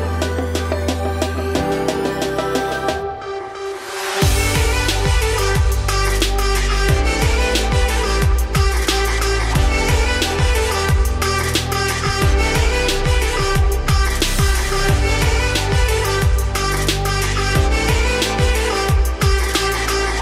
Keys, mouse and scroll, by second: 1.6 click, 2.0-2.3 scroll up 2, 2.3-3.5 middle drag, 3.5-4.5 drag, 4.5 middle click, 5.2 alt+x, 7.1 middle click, 8.0 click, 9.0-12.0 shift+drag, 13.9-14.2 middle drag, 14.2 click, 14.7 scroll down 2, 14.8-15.2 middle drag, 15.2 scroll up 3, 15.6 click, 15.8 scroll down 2, 16.0-16.8 middle drag, 16.8 ctrl+1, 17.9-19.1 middle drag, 19.1 ctrl+z, 19.4 click, 19.7 scroll down 2, 19.8-20.2 middle drag.